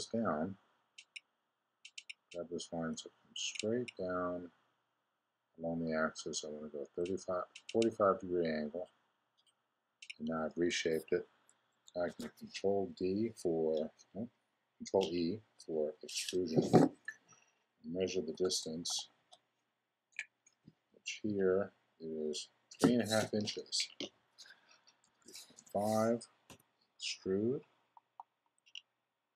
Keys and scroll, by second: 12.0 super+e, 24.8-25.7 typing.